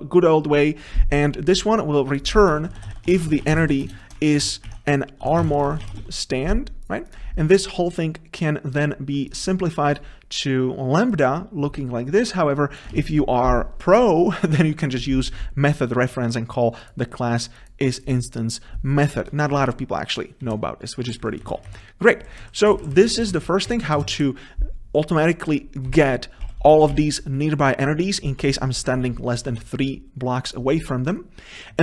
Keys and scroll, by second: 4.0 Return, 13.1 ctrl+v, 21.7 Delete, 24.1 ctrl+BackSpace, 24.3 Delete.